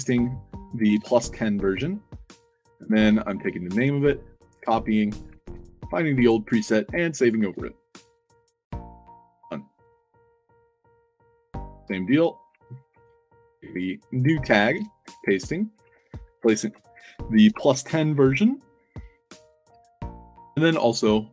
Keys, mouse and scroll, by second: 0.0 ctrl+v, 0.7 1, 3.6 ctrl+c, 4.5 click, 5.1 click, 5.3 ctrl+v, 6.1 click, 7.1 click, 7.4 ctrl+v, 7.9 click, 9.8 click, 10.7 click, 11.5 middle click, 12.3 click, 12.8 ctrl+c, 13.6 click, 14.4 click, 14.7 ctrl+v, 15.7 click, 15.8 ctrl+v, 17.2 1, 19.5 click, 20.1 ctrl+c.